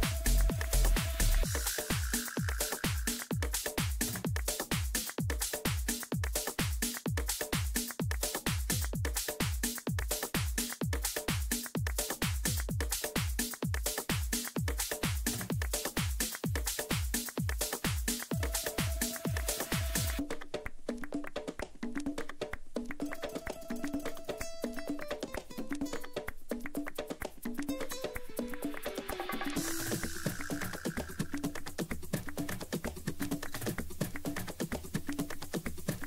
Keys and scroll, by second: 6.2 Delete, 13.4 e, 18.4 ctrl+a, 19.9 space, 26.1 Left, 27.6 Up, 28.2 Left, 28.6 Down.